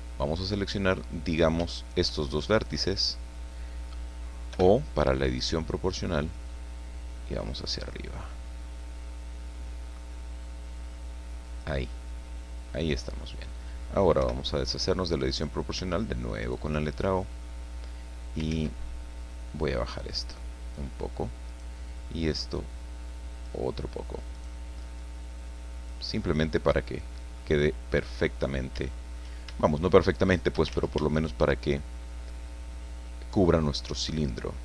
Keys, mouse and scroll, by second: 1.3 right click, 1.8 shift+right click, 2.2 shift+middle click, 2.9-3.2 scroll down 1, 3.2 middle click, 4.5 o, 6.5 click, 7.4-8.1 scroll up 3, 10.0-11.4 scroll down 6, 11.9-13.4 drag, 14.2 o, 15.3 right click, 16.4 shift+right click, 16.8 shift+middle click, 18.5 ctrl+z, 19.3-20.9 drag, 21.5 right click, 22.4-23.7 drag, 24.3 right click, 25.0-26.1 drag, 26.2-27.5 middle drag, 28.3 scroll up 1, 28.8 shift+middle click, 30.0 shift+right click, 30.7 ctrl+shift+z, 31.1 ctrl+shift+right click, 32.3-33.5 drag, 33.6 scroll down 1, 33.8-34.6 middle drag.